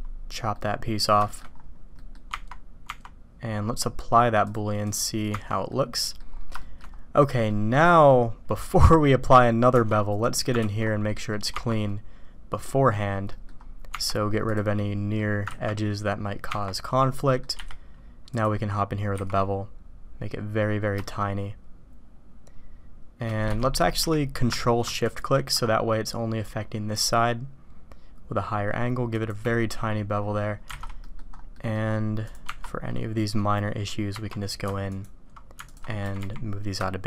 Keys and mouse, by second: 0.6-1.0 middle drag, 1.2 shift+middle drag, 2.0 middle click, 4.4-5.0 drag, 5.7-6.2 drag, 6.6 shift+drag, 7.5 click, 10.6 ctrl+x, 11.1 click, 11.5 Tab, 11.9 click, 13.2 click, 14.5-15.2 drag, 15.5 ctrl+x, 16.5 Tab, 17.3 click, 17.6 q, 30.8 alt+a, 31.0 click, 31.5 drag, 32.5 Tab, 33.0 click, 34.8 alt+click, 35.6 alt+click, 36.0 g.